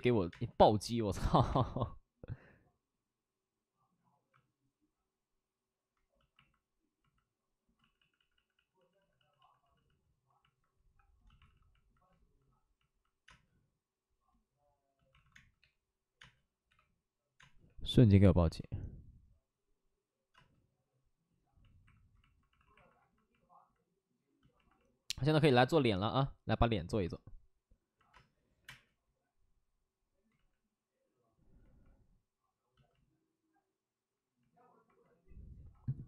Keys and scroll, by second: 1.3 ctrl+z, 1.3 space, 1.4 space, 7.7 ctrl+z, 7.9 ctrl+z, 8.1 ctrl+z, 8.2 ctrl+z, 8.4 ctrl+z, 11.3 ctrl+z, 11.4 alt+s, 13.2 space, 15.0 alt+s, 15.3-18.3 typing, 18.3 ctrl+z, 20.3 space, 22.5 alt+s, 28.0 space, 28.5 s, 30.2 ctrl+z, 30.2 space, 30.2 3, 35.8 ctrl+z.